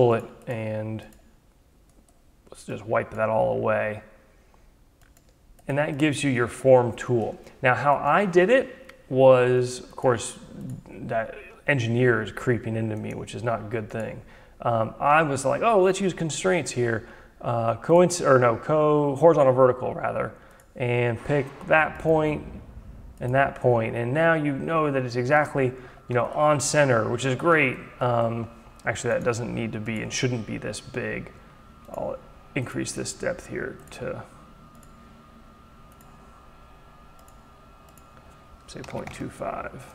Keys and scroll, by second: 30.8 d, 38.4 2, 39.1 Return.